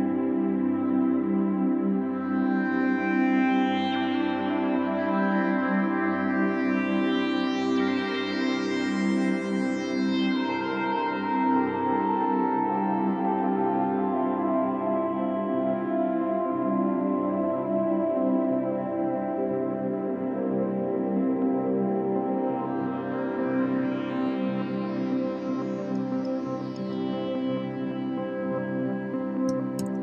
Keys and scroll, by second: 2.1 space, 4.5 space, 7.9 space, 11.6 space, 13.2 super+0, 14.7 super+space, 18.5 super+z, 24.9 space, 29.8 super+0.